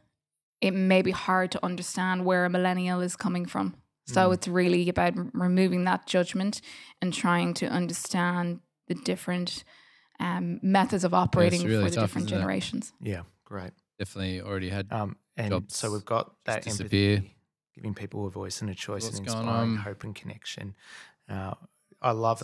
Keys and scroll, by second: 9.1 g, 10.3 d, 12.3 d, 13.9 g, 15.1 d, 16.2 g, 20.0 Delete.